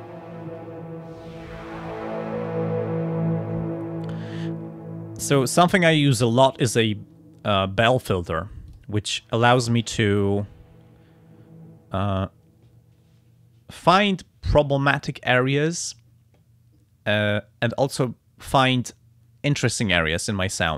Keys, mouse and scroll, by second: 6.6 click, 8.7 click, 10.4-12.4 drag.